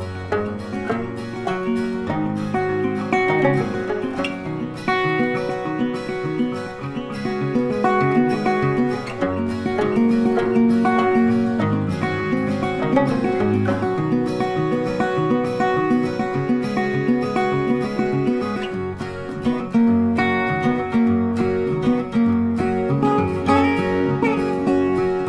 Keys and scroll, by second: 18.0 ctrl+t.